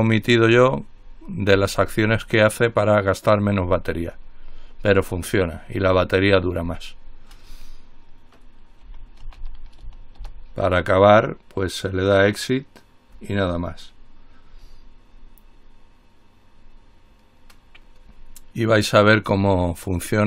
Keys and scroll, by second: 8.8-10.5 typing, 12.9 typing.